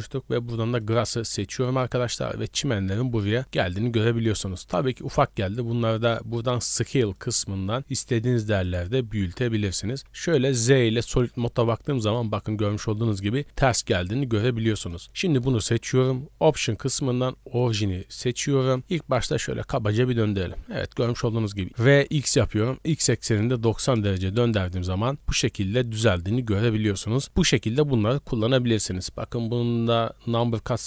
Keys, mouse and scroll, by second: 2.2-2.6 scroll up 3, 3.3 shift+middle drag, 3.7 right drag, 7.2-8.7 drag, 10.0 z, 11.4-11.9 middle drag, 11.9-12.2 scroll up 1, 12.4-12.8 shift+middle drag, 12.8 scroll up 1, 13.1-13.8 middle drag, 14.0-14.7 scroll down 2, 14.8 right click, 15.3 scroll down 1, 15.6 shift+middle click, 16.5-18.5 drag, 18.8 r, 21.7 ctrl+z, 25.0-26.4 middle drag, 27.0 middle drag, 28.4 right click, 30.3-30.8 drag.